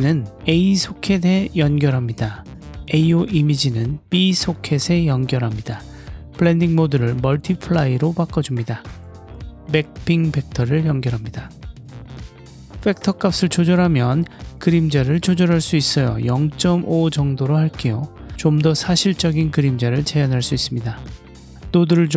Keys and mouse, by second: 4.1-5.3 drag, 6.5-7.7 drag, 8.7-9.2 drag, 9.3-10.2 drag, 10.9 click, 11.3-11.7 ctrl+middle drag, 12.2-13.9 drag, 15.6 click, 17.0 m, 17.8 m, 18.7 m, 19.3 m, 21.7 click.